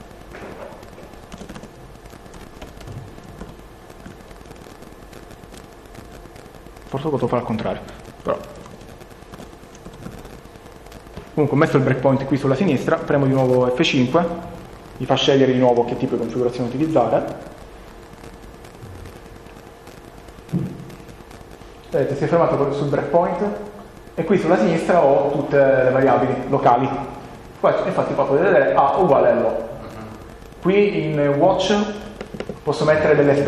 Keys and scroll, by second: 1.2 a, 2.3-3.9 typing, 4.0 Down, 6.0 ctrl+BackSpace, 6.0 Left, 7.9-10.7 typing, 8.8 Right, 13.1 F5, 15.7 Return.